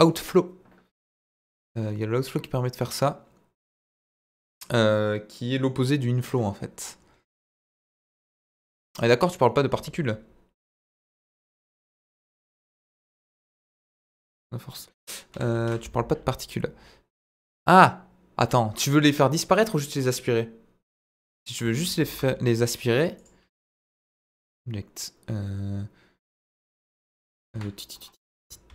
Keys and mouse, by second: 7.4-8.9 drag, 15.3 Delete, 15.5 shift+a, 21.9 shift+a, 23.5-23.9 middle drag, 24.5-26.4 drag, 26.8 middle click, 27.5 KP_1, 28.6 shift+d.